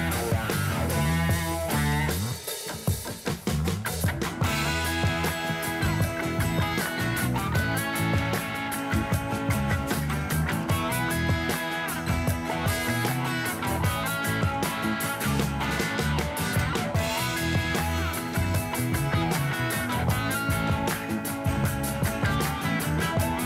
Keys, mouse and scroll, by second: 3.1 click, 3.5 click, 3.9 click, 4.2 click, 4.8 shift+click, 5.1 shift+click, 5.3 shift+click, 6.1 shift+click, 7.2-7.7 scroll down 4, 7.7 g, 10.5 shift+a, 14.5-23.4 drag.